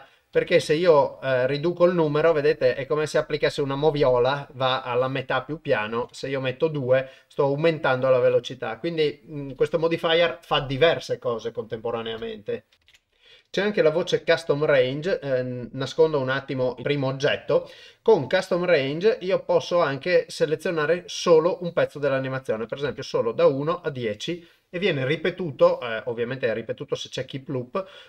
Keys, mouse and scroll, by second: 5.7 click, 17.9 click, 22.2 click, 26.2 click, 27.2 click.